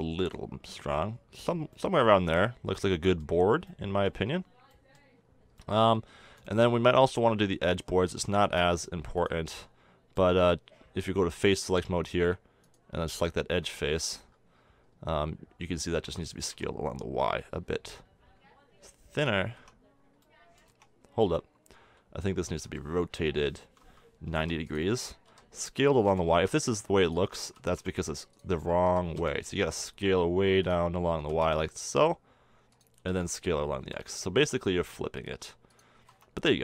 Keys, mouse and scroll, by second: 3.4-6.0 middle drag, 6.6-12.2 middle drag, 9.2-11.4 drag, 11.9 click, 12.2 a, 16.1 s, 19.4 a, 19.6 Tab, 20.0-20.4 middle drag, 20.7 Tab, 22.6 r, 25.3 s, 27.4 s, 28.8 s, 31.2 s, 33.0 s, 36.0 a, 36.1 Tab.